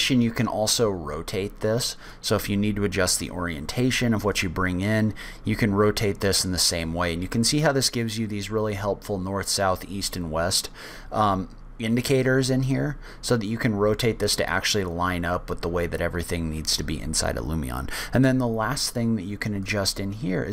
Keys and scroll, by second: 3.8 w.